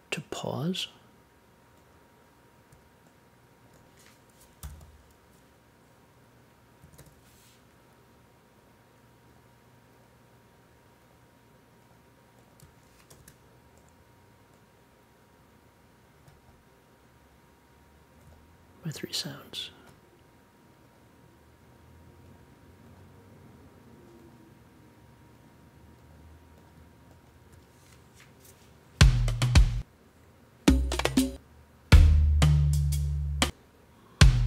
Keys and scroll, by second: 4.6 p, 6.8 a, 13.0 super+j.